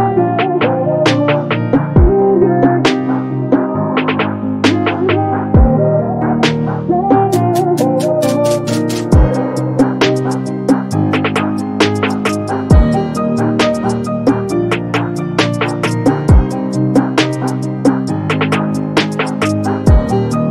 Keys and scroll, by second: 16.6 p, 17.9 space, 19.7 p.